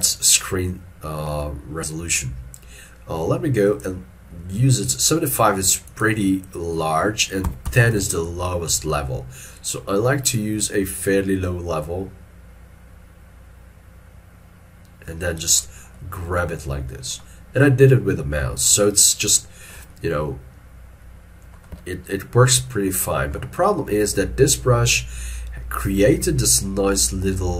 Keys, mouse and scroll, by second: 7.5 1, 8.0 Return, 16.0 middle click, 18.9 ctrl+middle click, 20.0 middle click, 21.9 ctrl+middle click, 22.8 shift+middle click, 23.1 shift+middle click.